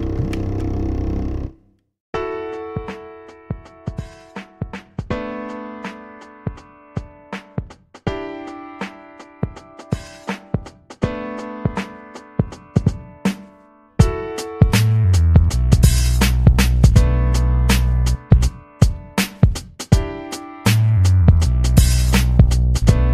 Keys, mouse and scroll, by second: 3.2 click, 3.9 click, 6.6 click, 9.4 ctrl+scroll up 2, 10.3-10.6 ctrl+scroll up 2, 11.0 ctrl+scroll up 2, 12.3 ctrl+scroll up 2, 13.2 ctrl+scroll up 2, 14.5-17.1 drag, 18.4-21.2 drag.